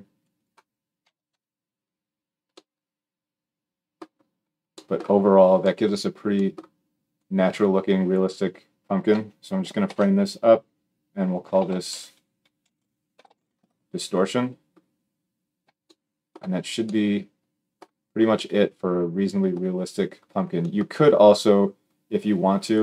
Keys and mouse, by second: 9.6 ctrl+j, 10.0 F2.